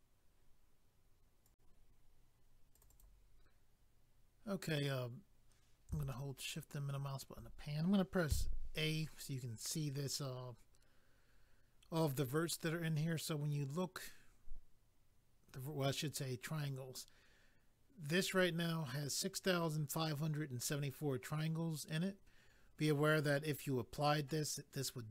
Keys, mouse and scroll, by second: 1.4 click, 2.7 click, 2.8 click, 2.9 click, 3.0 click, 4.6 scroll down 1, 6.1 shift+middle click, 8.3 a.